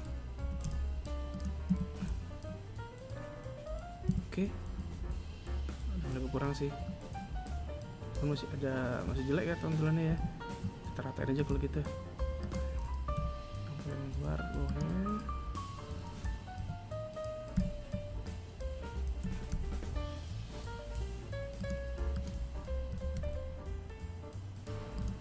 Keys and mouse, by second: 0.9 a, 3.2 Tab, 9.3 Tab, 10.5 right click, 11.6 right click, 12.4 KP_7, 13.8 right click, 15.7 KP_7, 16.7 KP_3, 18.4 g, 21.3 right click, 22.1 g, 24.7 right click.